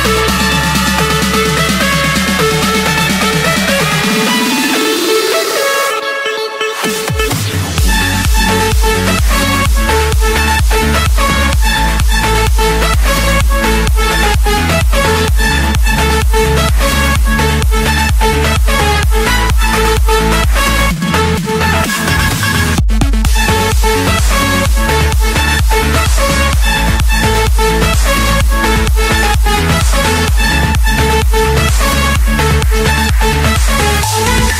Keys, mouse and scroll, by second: 0.0-0.3 scroll, 1.1 click, 2.1 click, 3.4 click, 5.1 click, 5.3-6.3 scroll, 9.2 click, 9.8 click, 10.5-11.5 drag, 10.9 Escape, 11.8-12.9 drag, 13.8-15.3 middle drag, 17.3-19.6 typing, 19.2 Return, 19.9 Return, 20.8 Escape, 23.2 click, 24.9 click, 25.4-26.0 scroll, 26.0-26.7 scroll down 12, 27.3 click, 27.6-28.5 scroll down 10, 28.7 click, 29.0-29.4 scroll up 4, 29.4-30.3 scroll, 31.9 click, 33.8 click, 34.0 scroll down 1.